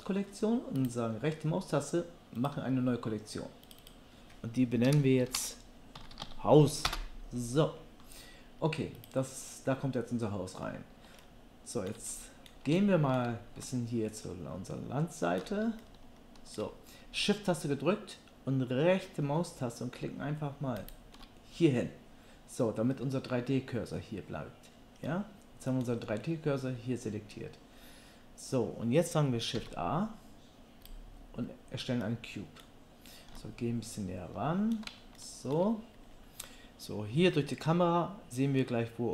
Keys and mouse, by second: 0.8-3.8 right drag, 9.1-11.4 right drag, 11.4-16.4 shift+drag, 16.4-19.0 shift+middle drag, 19.0-20.9 shift+drag, 20.9-29.7 shift+middle drag, 29.6 shift+a.